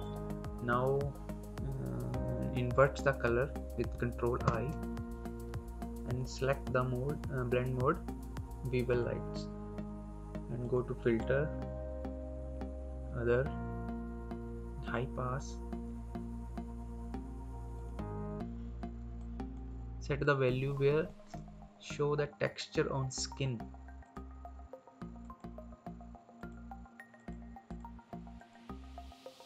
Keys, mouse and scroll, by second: 3.8 ctrl+click, 4.3 ctrl+i, 6.0 click, 8.8 click, 14.7 click, 17.6 click, 23.9 click.